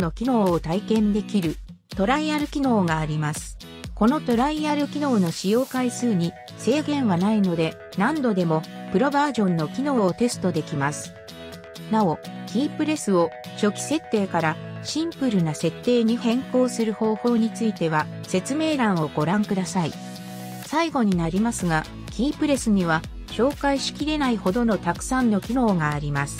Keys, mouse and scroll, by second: 16.0 click, 19.7 Num_Lock, 19.7 click, 20.8 right click, 23.4 Num_Lock, 23.4 right click.